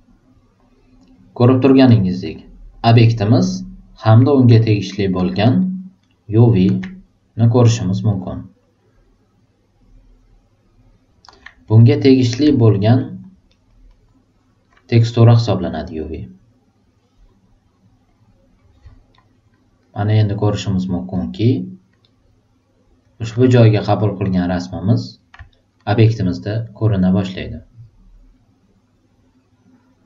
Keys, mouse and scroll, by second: 1.8 click, 2.2 click, 4.7 alt+right click, 5.2 alt+middle click, 5.6 alt+right click, 6.0 alt+super+middle click, 7.7 click, 8.1 click, 11.8 click, 12.5 alt+right click, 13.0 alt+super+middle click, 13.4 alt+super+right click, 13.8 alt+super+middle click, 18.1 super+click, 19.1 alt+super+right click, 19.8 alt+super+right click, 20.4 alt+super+click, 21.1 alt+super+middle click, 22.0-23.0 alt+super+right drag, 25.5 alt+super+right click, 25.9-30.0 drag.